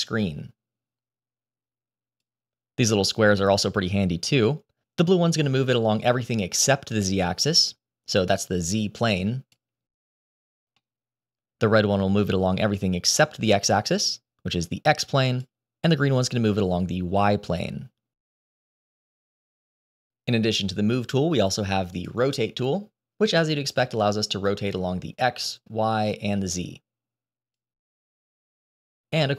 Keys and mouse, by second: 3.3-5.7 middle drag, 6.9 click, 7.2-10.2 drag, 10.7-11.6 middle drag, 12.7 click, 12.9-15.3 drag, 15.6-16.4 middle drag, 16.8-20.7 drag, 21.6 click, 23.4-25.2 drag, 25.6 click, 25.9-27.1 drag, 27.8 click.